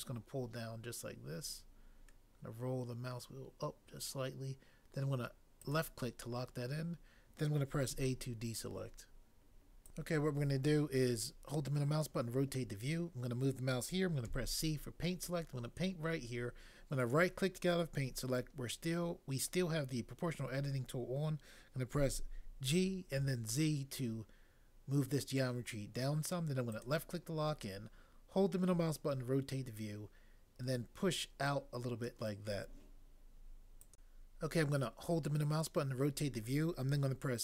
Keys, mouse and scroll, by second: 7.9 a, 14.2 c, 22.0 g, 23.2 z.